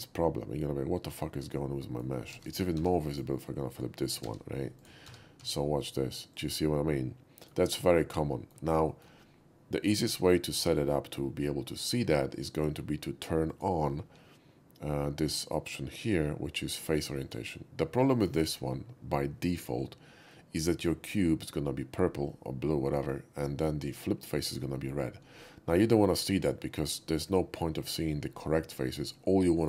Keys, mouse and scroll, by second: 2.4 ctrl+z, 2.8 Tab, 3.2 click, 4.3 alt+n, 4.8 click, 5.1 Tab, 5.4 q, 5.6 Tab, 5.8 click, 6.4 click, 6.7-7.5 middle drag, 7.7 middle click, 8.3 middle drag, 8.9 shift+middle click, 13.5 click, 17.2 click, 20.4-21.5 middle drag, 22.3 middle click, 24.3 middle click, 25.2 middle click.